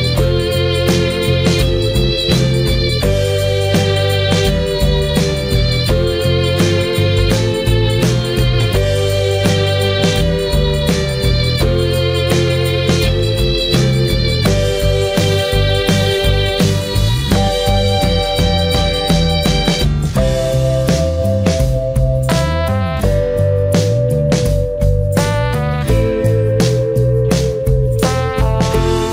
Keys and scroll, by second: 0.7 ctrl+z.